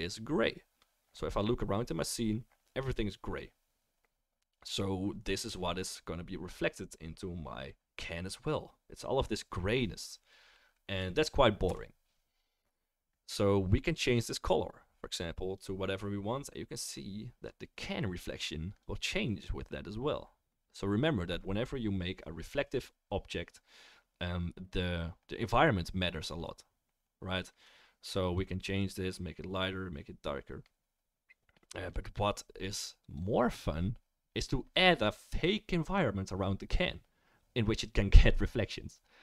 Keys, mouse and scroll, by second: 11.6 KP_0, 12.4-39.2 right drag, 14.2 click.